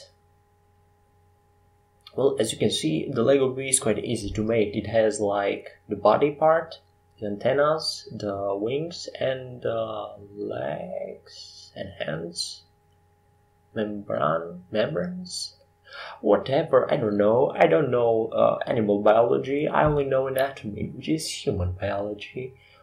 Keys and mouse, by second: 5.5 e, 6.5 s, 7.9 e, 17.6 s, 20.1 e.